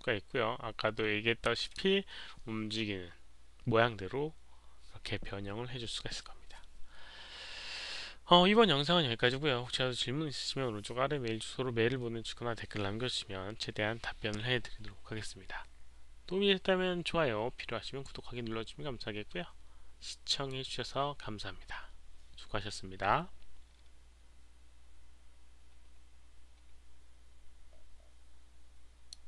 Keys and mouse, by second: 5.7 alt+click, 5.7 alt+right click, 8.9 alt+click, 29.0 click.